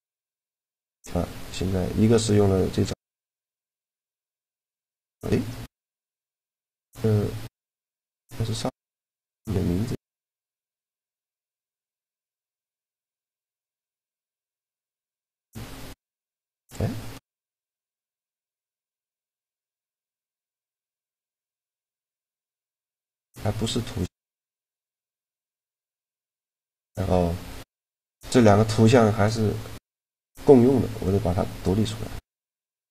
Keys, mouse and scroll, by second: 0.0-1.8 drag, 2.4 middle click, 3.1 right click, 3.5 shift+g, 4.2 right click, 10.1 click, 13.2 click, 14.0 right click, 14.1 click, 14.3 right click, 14.7 middle click, 14.9 shift+g, 16.0 right click, 17.3-18.9 middle drag, 19.5-23.6 drag, 23.6-25.3 middle drag, 30.7-32.5 drag, 32.8 click.